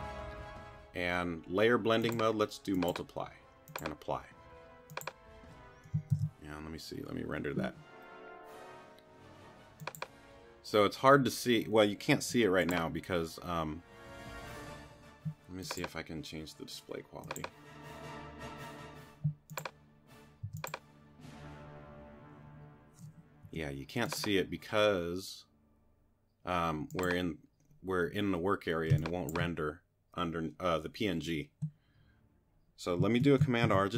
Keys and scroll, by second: 6.1 super+r, 12.2 q, 20.5 t, 23.4 q, 28.9 space, 33.6 super+r.